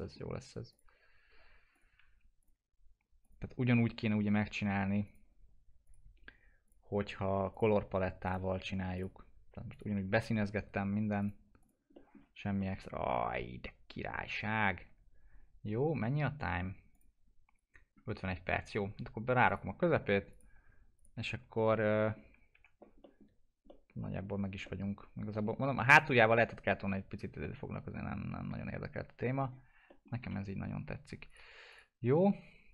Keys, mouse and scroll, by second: 0.3-0.7 scroll up 1, 0.7 click, 7.2 F4, 9.9 F4, 11.1 click, 12.1 scroll down 1, 12.5-14.3 alt+middle drag, 14.3-14.9 scroll up 1, 16.9 click, 19.4 click, 20.9 ctrl+click, 21.4 alt+q, 22.0 middle click, 22.4 scroll up 1, 22.5 F4, 23.0 middle click, 23.3-23.6 scroll down 1, 23.6 alt+middle click, 24.6 middle click, 25.0 scroll up 1, 25.7 scroll down 1, 25.9-27.4 alt+middle drag, 27.4 alt+middle click, 28.2 scroll up 1, 28.9 F4, 29.9 alt+middle click, 30.3 F4, 31.3 click.